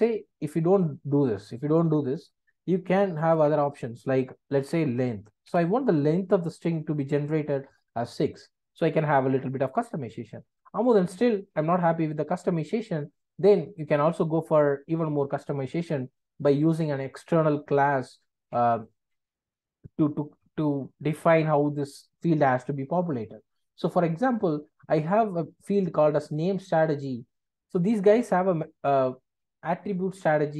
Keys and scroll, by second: 3.3 ctrl+space, 5.4 Return.